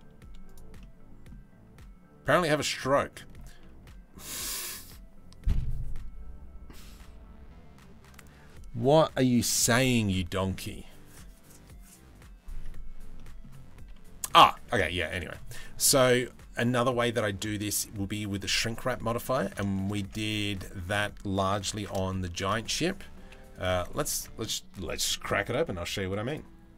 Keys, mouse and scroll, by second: 0.4 middle click, 2.8 shift+middle click, 12.8 middle click, 14.3 Tab, 14.6 middle drag, 18.8 middle click, 19.3 shift+middle click, 19.6 Tab, 20.1 2, 21.3 ctrl+b, 22.8 Delete, 24.1 ctrl+s.